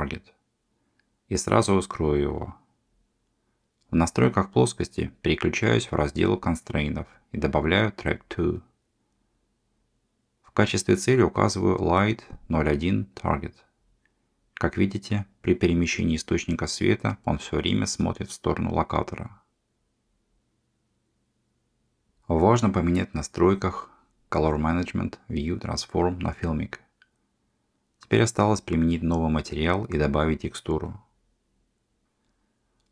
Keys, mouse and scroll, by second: 4.3 click, 5.3 click, 7.6-8.5 drag, 10.3 click, 14.1 middle click, 15.4 g, 21.1 click, 21.8 middle click, 22.3 g, 22.8 click, 24.2 click, 26.0-31.8 drag.